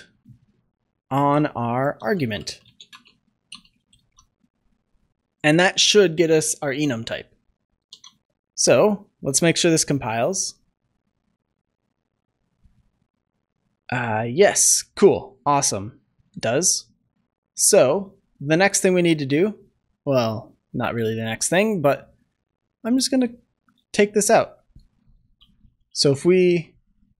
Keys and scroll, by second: 2.6 Return, 7.8 ctrl+s.